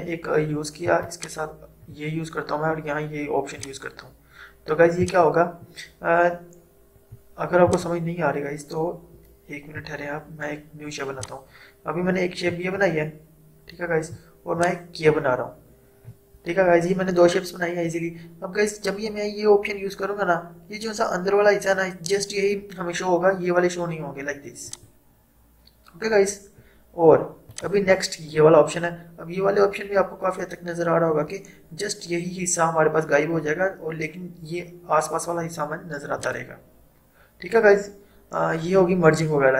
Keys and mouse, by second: 7.8-14.6 drag, 14.6-24.7 shift+drag, 27.6 click, 36.2 click.